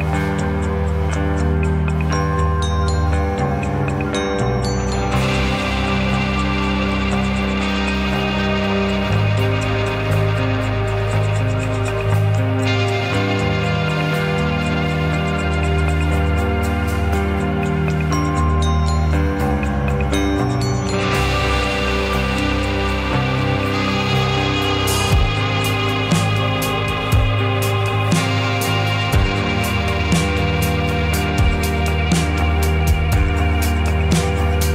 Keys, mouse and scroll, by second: 0.0 click, 0.5 shift+click, 1.2 g, 4.9 ctrl+z, 5.4-6.6 middle drag, 6.6 g, 7.9 click, 8.1-10.1 middle drag, 10.1 click, 10.5 shift+click, 11.1 g, 12.6 click, 12.8 shift+click, 13.4 g, 14.2 click, 14.4 middle click, 14.8-16.2 middle drag, 16.6-19.5 middle drag, 19.5 click, 20.0 shift+middle click, 20.6 shift+click, 21.0 middle click, 21.6 `, 22.9 g, 24.9 g, 27.1 click, 27.6 a, 28.1 g, 29.2 g, 30.7 r, 32.5 g, 33.9 g.